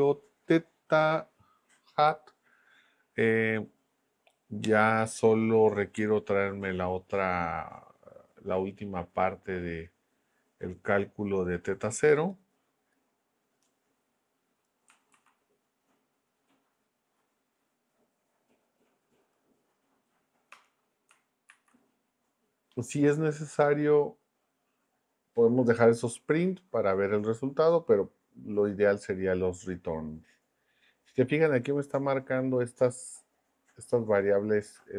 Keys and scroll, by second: 15.1 super+c, 20.5 Return, 21.5 super+v.